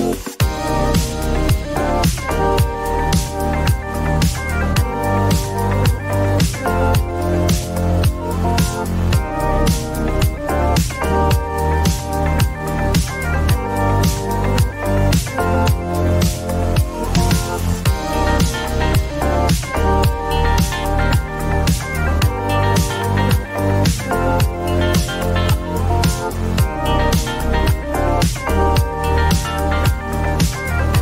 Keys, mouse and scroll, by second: 0.1-2.4 drag, 3.5-4.5 typing, 5.5 Return, 5.9-6.3 scroll, 7.1 click, 9.7 click, 10.3-12.8 drag, 11.2 typing, 12.6-13.3 typing, 14.8 click, 14.9 click, 18.0 click, 19.9-23.0 drag, 21.2-21.8 typing, 24.6-25.2 drag.